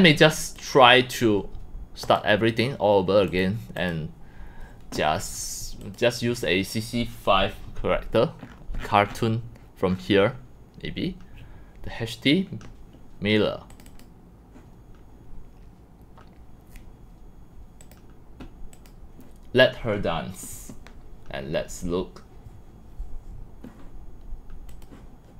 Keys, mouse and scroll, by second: 0.1 click, 0.3 click, 2.0 click, 3.3 click, 3.8 click, 5.8 click, 6.3 click, 8.4-9.4 scroll, 9.9 scroll, 13.7 scroll, 13.8 click, 14.0 click, 18.0 click, 18.7 click, 19.5-24.0 drag, 24.8 click.